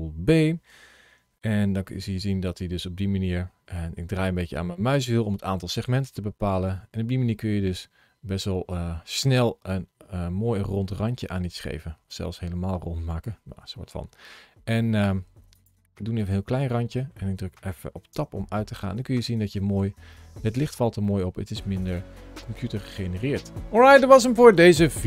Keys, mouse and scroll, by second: 0.1 ctrl+b, 3.1 scroll down 1, 4.1-4.5 scroll up 2, 4.5 scroll down 2, 15.4 click, 16.0 click, 16.5 middle click, 18.0 Tab, 18.4 middle click, 19.9 middle click.